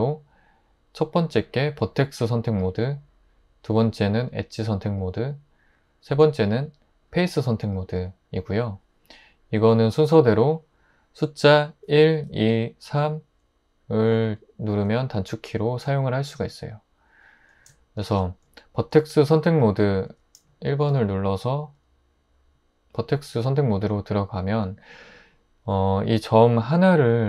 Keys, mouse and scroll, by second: 11.9-12.8 typing, 20.1 1.